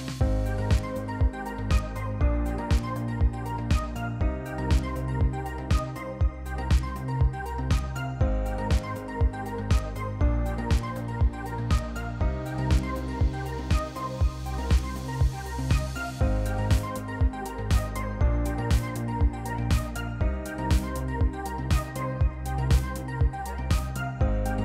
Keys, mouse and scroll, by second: 0.1 click, 1.2 click, 2.8 click, 4.3 click, 4.6 click, 5.6 click, 6.7 click, 7.8 click, 8.6 click, 9.9 click, 10.4 F1, 11.0 F2, 11.9 click, 11.9 click, 12.6 click, 13.3 click, 13.8 Delete, 14.8 click, 14.8 click, 15.4 click, 15.4 click, 16.0 click, 16.2 Delete, 16.7 F1, 17.2 =, 17.5 =, 17.8 F2, 19.2 click, 20.4 click, 20.5 Delete, 21.9 click, 22.7 click, 23.3 F1, 24.0 click, 24.2 -, 24.3 -.